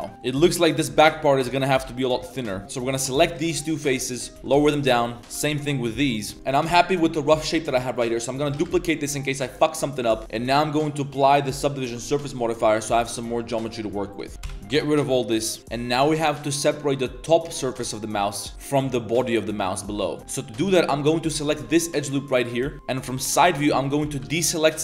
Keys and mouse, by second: 0.1 middle click, 0.1 Tab, 1.8 middle click, 2.1 3, 2.3 click, 2.4 middle click, 2.6 g, 2.7 click, 3.0 shift+middle click, 3.4 middle click, 3.8 shift+click, 4.0 middle click, 4.3 g, 5.2 2, 5.2 g, 6.3 Tab, 6.7 g, 7.5 click, 8.0 click, 8.5 shift+d, 10.4 middle drag, 11.1 click, 11.9-12.4 drag, 12.6 click, 12.8 Tab, 13.1-14.7 typing, 13.2 middle drag, 13.7 middle click, 14.4 ctrl+KP_Add, 15.6 middle click, 16.0 middle click, 16.7 middle click, 17.9 middle click, 18.9 middle drag, 19.7-20.1 middle drag, 21.1 alt+click, 21.7 z, 22.1 middle click, 22.7-24.2 typing.